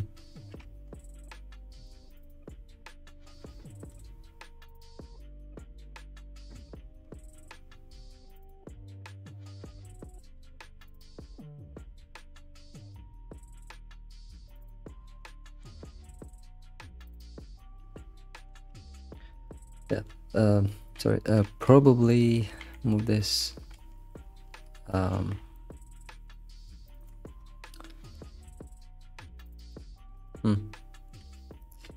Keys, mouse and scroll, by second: 0.0-3.0 shift+middle drag, 19.5-20.8 shift+middle drag, 20.8 alt+x, 21.5 alt+x, 22.6 g, 23.7 alt+x, 24.1-24.4 scroll down 3, 24.4 alt+x, 24.7 scroll down 3, 24.9 middle click, 25.2 Tab, 25.6 scroll down 1, 25.6 middle click, 26.2 alt+shift+z, 26.4-26.9 middle drag, 26.9 ctrl+s, 27.2-27.7 scroll up 8, 27.7-29.3 middle drag, 29.3 alt+shift+z, 29.5-31.3 shift+middle drag, 31.3 alt+shift+z, 31.6 middle click.